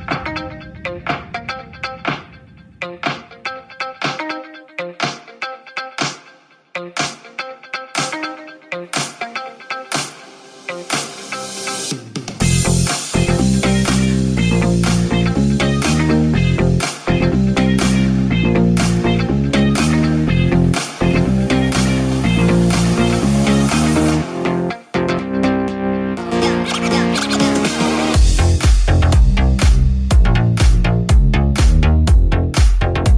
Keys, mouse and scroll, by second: 3.0 g, 10.3 f, 22.9-24.6 ctrl+drag, 25.7 Tab, 27.7 Tab, 27.7-33.1 middle drag.